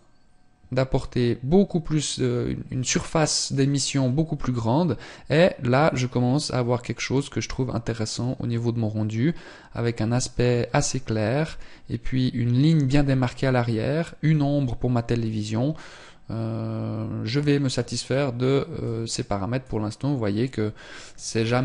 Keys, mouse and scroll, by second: 18.7 click.